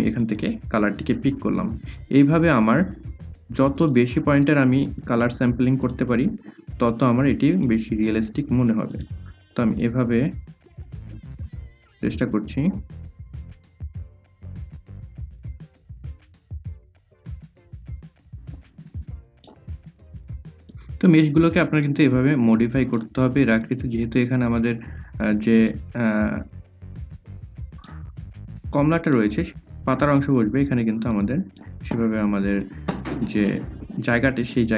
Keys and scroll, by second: 1.0 a, 4.3 i, 5.0 a, 7.0 i, 8.3 a, 9.7 i, 11.5 a, 12.6-18.4 typing.